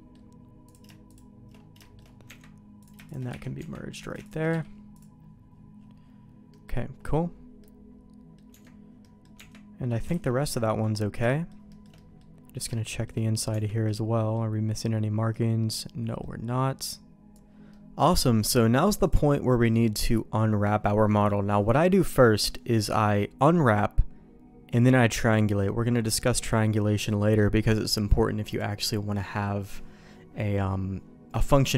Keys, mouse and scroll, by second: 0.6 click, 1.0 shift+click, 1.8 shift+middle click, 2.2 Tab, 2.7 click, 3.0 click, 3.3 1, 3.5 Tab, 3.9 click, 4.4 q, 6.4 middle click, 7.5 middle click, 9.0 middle click, 9.3 Tab, 10.1 alt+a, 10.4 middle click, 11.2 shift+middle click, 11.6 shift+click, 11.7 shift+middle click, 11.9 middle click, 12.7 shift+middle click, 13.4 Tab, 13.8 middle click, 15.3 middle click, 17.6 middle click, 19.0 click.